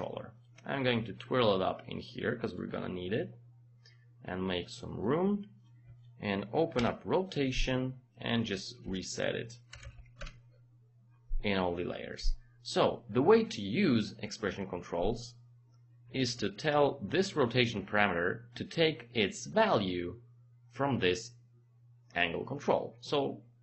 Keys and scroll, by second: 6.7 r, 8.9-9.9 typing, 10.2 Return.